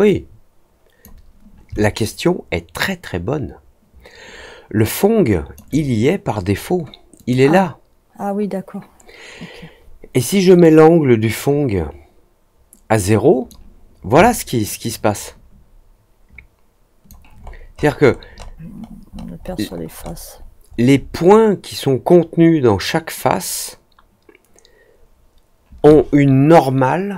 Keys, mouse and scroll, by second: 1.7-5.5 alt+drag, 7.1 click, 10.6-13.4 drag, 14.2-17.0 alt+drag, 17.4 alt+scroll up 1, 17.7 alt+scroll down 1, 17.8-18.2 alt+scroll up 2, 18.3 alt+middle click, 18.7 alt+middle click, 19.0 alt+middle click, 19.3 alt+middle click, 19.6 alt+middle click, 20.0 alt+middle click, 20.3 alt+middle click, 20.6 alt+scroll up 1.